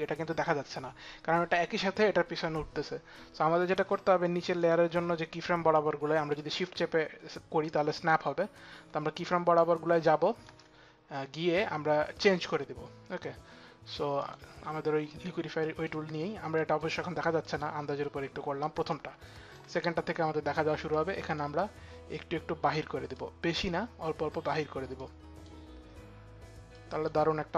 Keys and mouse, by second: 4.2 click, 6.0 click, 13.9 click, 15.3 click, 17.0 click, 17.4 click, 18.6 click, 20.5 click, 24.6 click, 26.3 click.